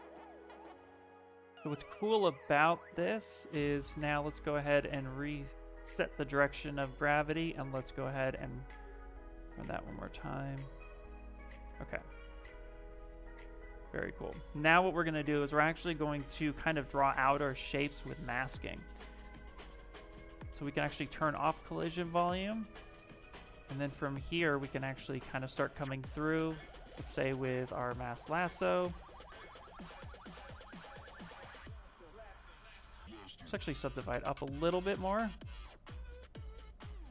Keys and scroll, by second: 0.0 s, 11.2 Escape, 12.7 s, 17.0 s, 23.9 s, 33.5 ctrl+d, 33.9 ctrl+d, 34.4 shift+f.